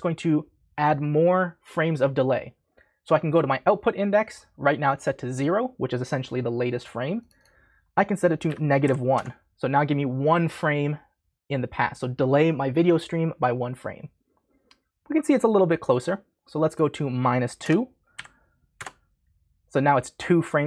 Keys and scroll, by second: 8.4 -, 8.8 1, 9.1 Return, 17.6 BackSpace, 18.1 2, 18.7 Return.